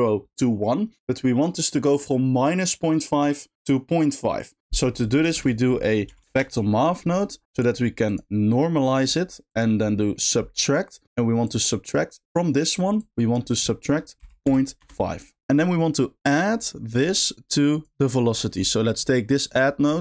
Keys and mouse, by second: 5.0 click, 5.3 shift+a, 8.1-10.2 drag, 10.2 middle click, 11.4-12.3 drag, 13.1-14.8 drag, 16.8 middle click, 17.5 click, 18.4 middle click, 19.0 click, 19.6 click.